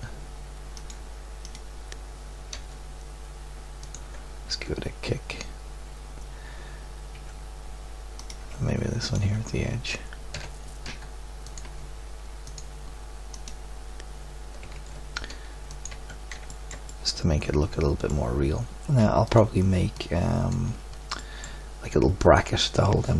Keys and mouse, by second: 2.5 r, 4.5 Tab, 7.1 Tab, 8.2-10.7 drag, 10.3 g, 14.6 g, 15.9 Tab, 17.3 middle click.